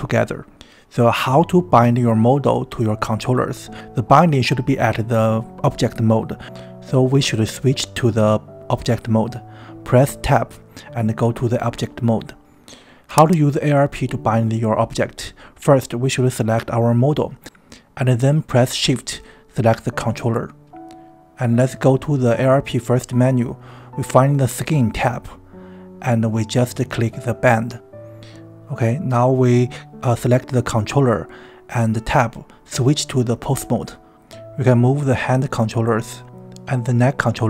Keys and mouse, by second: 5.9 Tab, 15.0 click, 16.0 click, 19.7 shift+click, 23.3 click, 28.1 click, 30.8 drag, 32.4 Tab, 33.5 click, 34.0 g, 35.1 right click, 36.5 r.